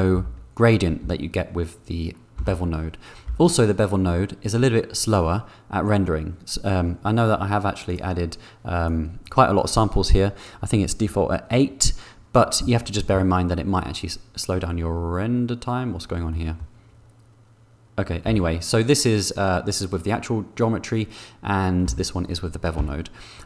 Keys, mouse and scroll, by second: 0.4 4, 1.3 3, 2.6 3, 3.5 4, 8.8 click, 12.6 click, 18.5 3, 22.1 4, 23.0 3.